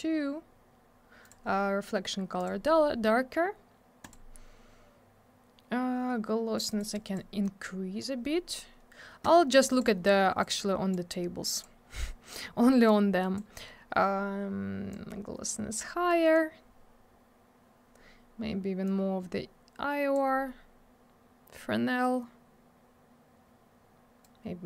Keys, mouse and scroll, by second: 1.2 click, 1.3 click, 2.4 click, 2.4 click, 4.0 click, 4.1 click, 6.5 click, 6.6 click, 6.7 click, 6.8 click, 6.8 click, 6.9 double click, 7.0 click, 7.1 click, 7.4 click, 9.7 click, 9.8 click, 10.4 click, 11.5 click, 11.6 click, 12.8 click, 14.9 click, 18.8 click, 24.2 click.